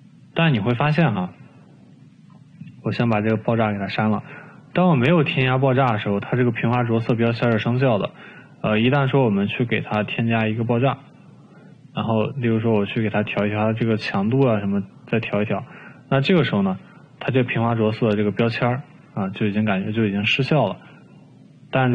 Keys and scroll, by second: 4.5 Delete.